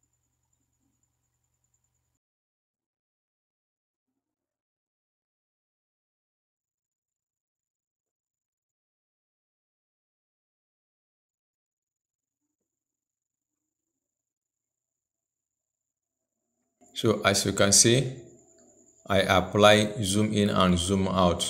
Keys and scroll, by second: 0.9 ctrl+v.